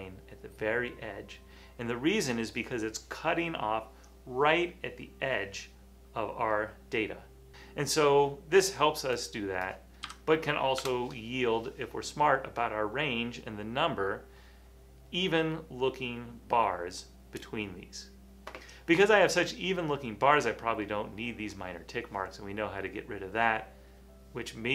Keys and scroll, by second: 10.1 1, 10.8 Return.